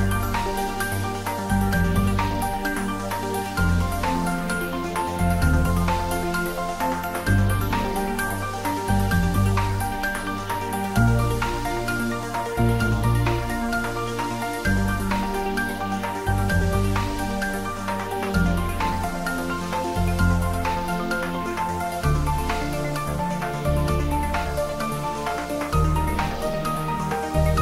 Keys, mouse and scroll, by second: 2.0 click, 3.8 Return, 5.2 click, 7.2 Return, 8.6 click, 11.4 Return, 12.4 ctrl+s, 12.7-14.2 ctrl+middle drag, 14.2 click, 14.9 ctrl+s, 15.1 click, 15.8-17.3 middle drag, 17.3 click, 18.9 ctrl+s, 20.1 Tab, 20.8 click, 21.2 Tab, 21.5-22.5 typing, 25.1 click, 25.4 Tab, 25.8 shift+middle click, 26.3 click, 26.7 ctrl+s.